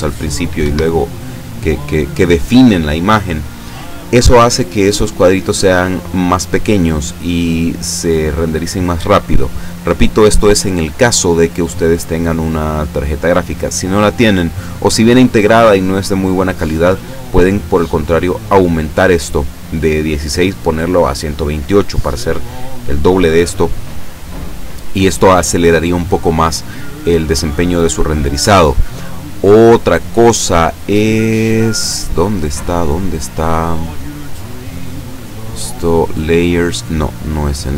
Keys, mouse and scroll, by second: 0.7 Escape, 28.4-28.8 scroll up 1, 29.5-30.4 scroll up 1, 30.8-31.4 scroll up 1, 31.4-32.7 scroll down 3, 34.4 click, 34.9-36.9 scroll down 1, 36.9 click.